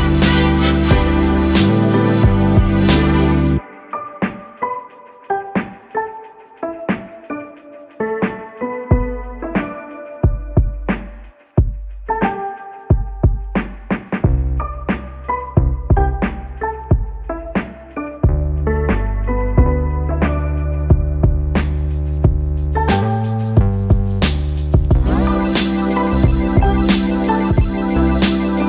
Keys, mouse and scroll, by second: 1.8-5.9 alt+drag, 5.9 right click, 9.6 click, 12.2-24.2 drag, 24.2 1, 25.9 8, 28.4-28.6 typing.